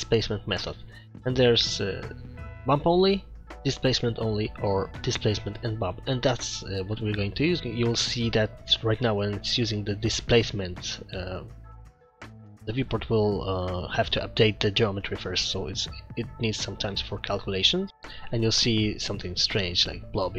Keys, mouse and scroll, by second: 0.0 scroll down 1, 1.0 click, 7.6 click, 7.6 scroll down 3, 8.0 middle click, 9.0 shift+middle click, 9.7 middle click, 10.4 shift+middle click, 11.3 middle click, 19.4-19.9 scroll up 3.